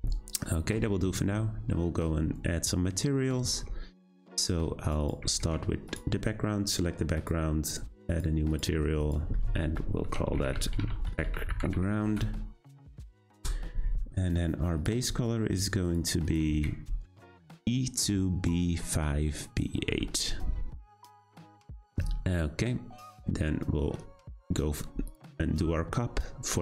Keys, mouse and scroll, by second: 0.1 scroll up 1, 5.9 click, 7.1 click, 8.1 click, 8.5-12.1 drag, 14.7 click, 25.0 click.